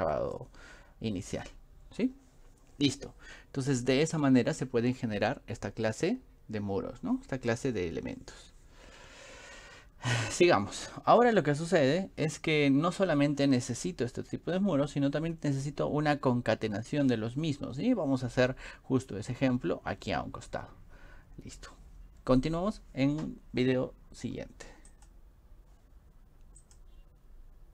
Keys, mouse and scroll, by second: 0.1 middle click, 24.9 click, 26.6 click.